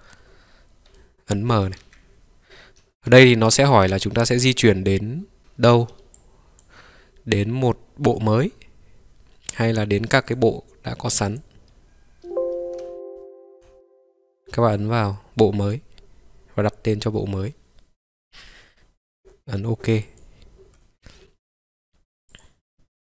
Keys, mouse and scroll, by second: 0.0-0.6 ctrl+right drag, 1.0 middle click, 1.9 m, 22.4 click.